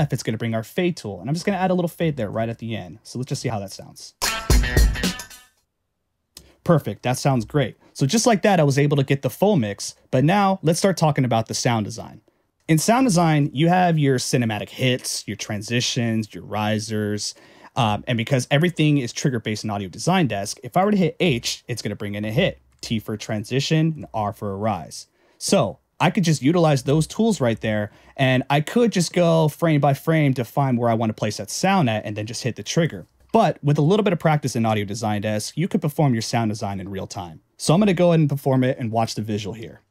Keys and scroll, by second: 2.4 a, 4.2 space, 21.2 h, 22.7 t, 24.0 r, 26.8 super+x, 27.5 super+Return.